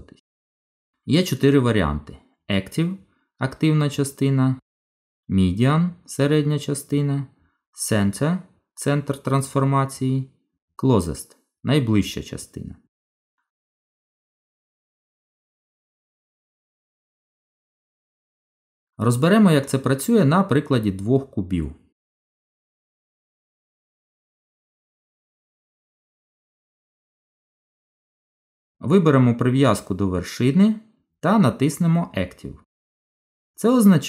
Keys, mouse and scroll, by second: 0.8 click, 18.0 click, 20.5 shift+d, 23.3 middle click, 26.5 click.